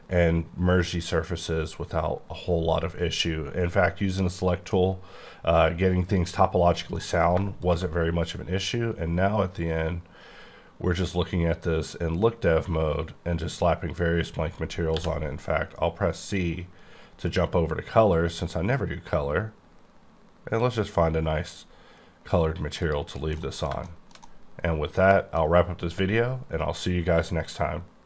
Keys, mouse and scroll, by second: 6.9 m, 7.2 m, 7.6 shift+click, 8.0-10.3 scroll up 11, 10.9-12.9 scroll up 5, 12.9-14.9 scroll up 3, 14.9 c, 15.3-15.7 scroll up 2, 16.6-18.2 scroll up 5, 18.2-18.7 scroll up 3, 19.1-19.7 scroll up 4, 20.6-21.6 scroll up 4, 21.6-22.1 scroll up 1, 22.8 click, 23.7 shift+middle click.